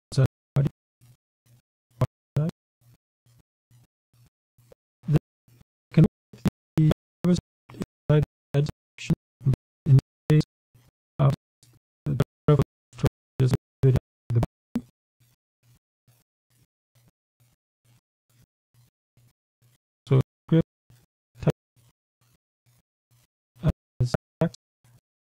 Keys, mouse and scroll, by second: 0.5 shift+1, 1.6 ., 3.1-10.0 typing, 12.1-14.0 typing, 15.3 click, 16.1 Return, 20.6-21.1 ctrl+scroll up 2, 21.3-22.1 ctrl+scroll up 2, 22.5-23.0 ctrl+scroll up 2, 23.1-24.0 ctrl+scroll down 3.